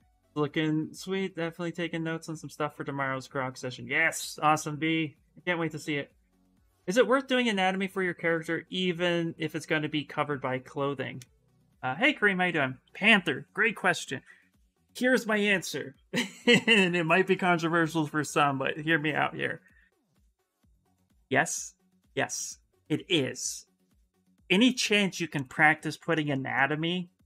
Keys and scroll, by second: 12.6 s, 26.7 s.